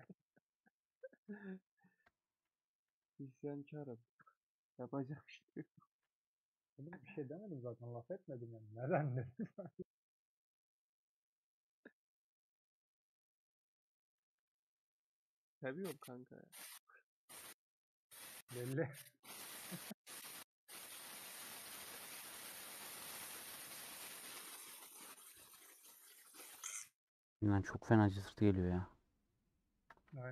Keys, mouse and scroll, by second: 0.1 scroll down 1, 0.1 middle click, 1.0 3, 1.0-2.1 alt+drag, 2.1 ;, 2.5 middle click, 2.8 2, 3.4 middle click, 4.0 click, 4.7 middle click, 5.6 a, 6.7-8.1 middle drag, 8.1 Tab, 8.3 middle click, 9.2 Tab, 9.4-13.0 middle drag, 13.0 2, 14.3 a, 15.3 middle click, 15.9 Tab, 15.9-20.5 middle drag, 20.5 Tab, 20.7-26.1 middle drag, 26.1 click, 27.0 a, 28.7 Tab.